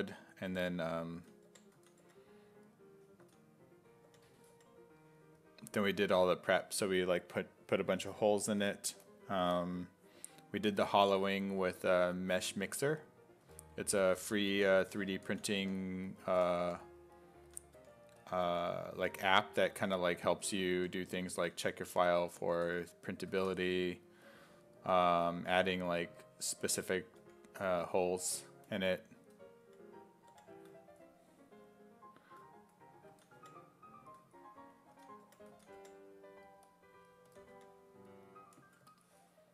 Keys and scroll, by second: 0.0-4.5 typing, 5.7 s, 6.0 5, 13.5-17.8 typing, 19.1 1, 20.4-23.6 typing, 27.2 1, 29.2 s, 29.7 5, 33.1 s, 33.4 5, 34.7-37.6 typing.